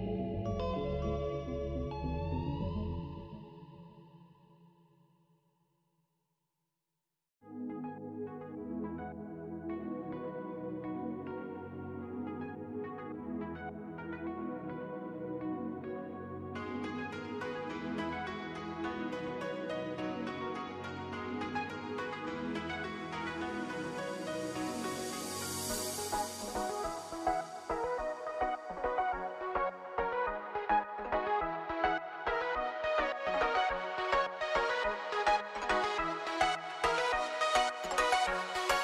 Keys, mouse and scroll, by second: 37.8 space, 38.0 scroll up 1, 38.5 click.